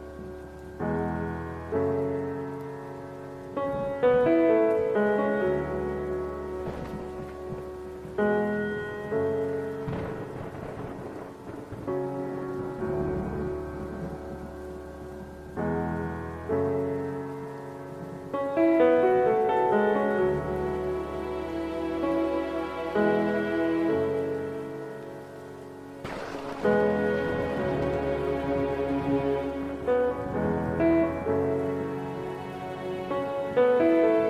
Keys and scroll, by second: 3.1 ctrl+KP_0, 7.7 alt+F6, 9.4 ctrl+shift+n, 11.6 KP_4, 11.8 KP_3, 12.1 Return, 12.3 Return, 12.5 Tab, 12.7 Tab, 13.8 Return.